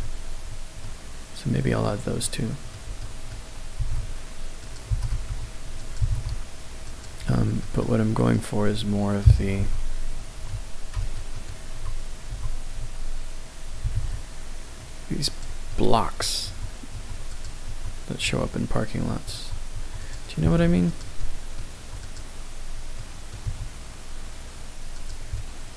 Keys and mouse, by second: 0.8 middle click, 1.7 middle click, 2.2-2.7 middle drag, 3.0-3.3 shift+middle drag, 3.7 g, 3.8 x, 4.6 click, 4.9 g, 5.1 y, 5.8 click, 6.0 g, 6.1 z, 6.9 click, 7.2-7.6 shift+middle drag, 7.8-8.2 middle drag, 7.8 typing, 9.6 KP_1, 11.0 alt+middle drag, 11.3 alt+middle drag, 12.3 f, 13.8 g, 13.9 z, 15.3 click, 15.7 middle click, 16.4 Tab, 16.9 Tab, 17.3 click, 17.7 Tab, 18.2 Tab, 19.3 Tab, 19.7 Tab, 20.0 click, 20.4 g, 20.5 z, 20.9 click, 21.2 middle click, 21.7 Tab, 22.0 click, 23.0 middle click, 23.4 s, 24.9 click, 25.4-25.7 middle drag.